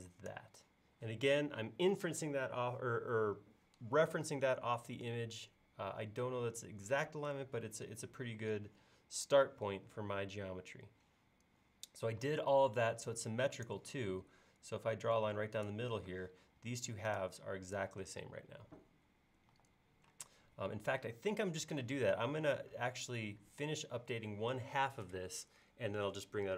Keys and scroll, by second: 12.2 l, 16.1 space, 19.5-20.2 typing.